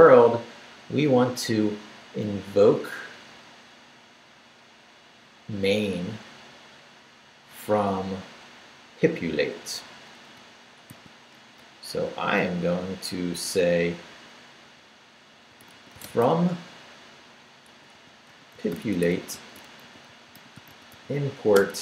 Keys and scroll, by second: 9.4 Up, 10.9 i, 11.3 Return, 12.2 Up, 15.1-21.8 typing.